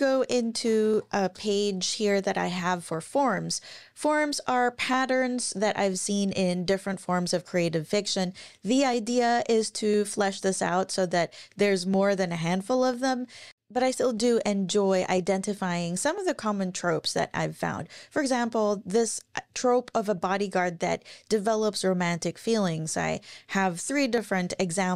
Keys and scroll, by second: 0.3-1.3 typing, 3.3 typing.